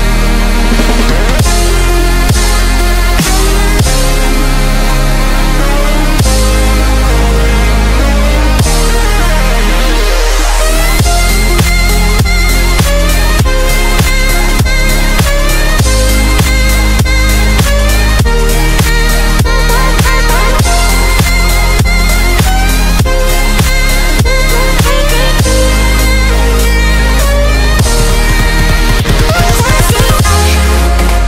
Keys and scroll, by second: 13.8 g, 28.1 v, 30.1 v.